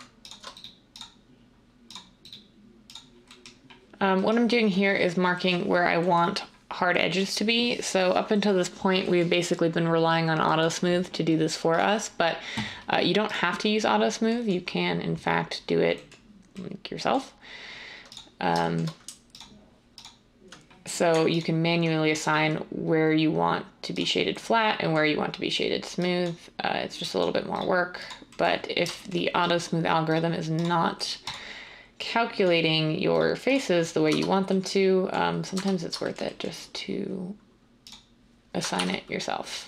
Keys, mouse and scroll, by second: 34.0 Tab, 35.5 Tab, 38.7 r.